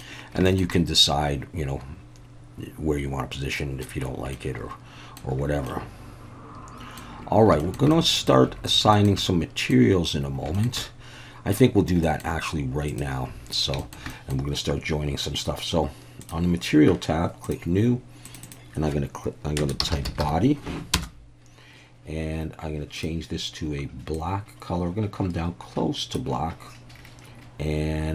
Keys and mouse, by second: 0.5 shift+middle click, 0.7-3.8 middle drag, 4.3-5.2 middle drag, 5.7-7.0 middle drag, 7.6 shift+middle click, 7.9-8.3 middle drag, 8.9 shift+middle click, 9.2-9.7 middle drag, 10.5 shift+middle click, 10.8-11.5 middle drag, 12.0 middle click, 12.9-13.4 drag, 13.8 shift+middle click, 14.1 middle click, 16.2 click, 17.4 drag, 18.3 click, 18.4-21.6 drag, 23.0 drag.